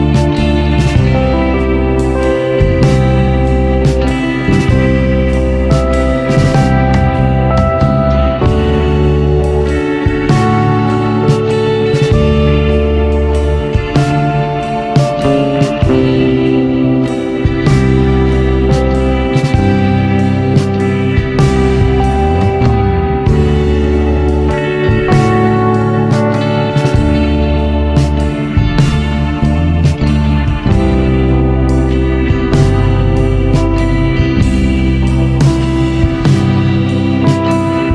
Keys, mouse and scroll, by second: 1.0 b, 3.7 click, 6.0 click, 6.4 b, 8.0 click, 11.5 click, 11.8 b, 13.4 click, 16.6 KP_7, 17.1-18.0 scroll down 1, 18.0 Tab, 18.5-19.4 scroll up 5, 19.4 scroll up 1, 19.6-21.3 drag, 27.8 ctrl+z, 28.5 Tab, 29.0 click, 30.3 b, 31.8 click, 34.1 Tab, 34.9 click, 36.6 Tab, 37.2 click.